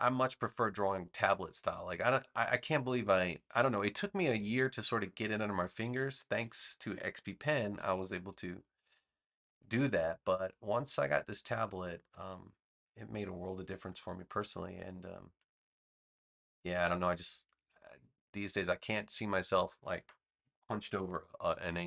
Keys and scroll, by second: 9.7 space, 17.4 space.